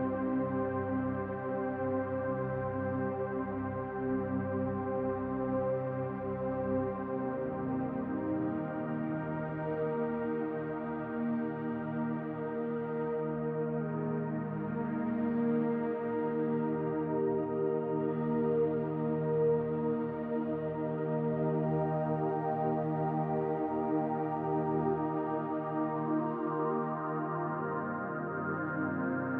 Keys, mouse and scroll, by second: 1.7 middle click, 3.9-4.5 scroll up 3, 4.5 shift+middle click, 5.1 right click, 5.9 middle click, 7.3-7.8 scroll down 3, 7.8 Tab, 8.3-9.0 scroll up 1, 9.0-9.5 scroll up 1, 9.5 middle click, 14.9 Tab, 16.4 ctrl+a, 17.5 Tab, 18.1 middle click, 19.8-20.6 scroll up 1, 20.9 middle click, 22.7 click, 27.0-28.1 scroll down 4, 27.4 middle click, 28.1 click, 28.5 scroll up 1, 29.1 middle click, 29.1-29.3 scroll up 2.